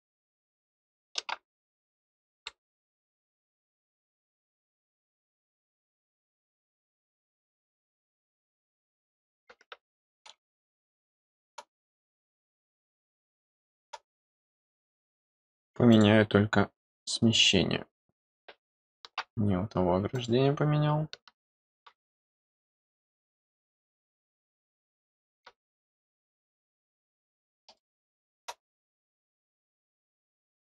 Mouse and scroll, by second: 4.4 click, 7.5 click, 8.2 click, 8.4 click, 10.4-11.5 middle drag, 12.0 click, 12.8-13.8 middle drag, 14.8 middle click, 15.9 click, 16.9 click, 20.1 click, 22.2 click, 23.2 click, 23.9 click, 26.6 middle click, 27.7 middle click, 29.0 click.